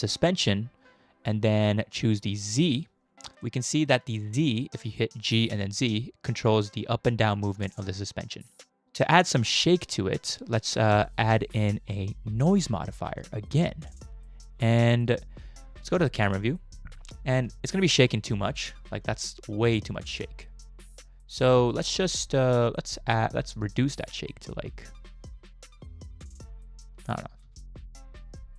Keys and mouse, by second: 2.5 click, 3.4 middle click, 3.9 shift+middle click, 5.3 g, 8.8 ctrl+z, 11.0-13.3 drag, 16.2 KP_0, 17.4 space, 21.6 space, 23.6-27.3 shift+drag, 27.4 space.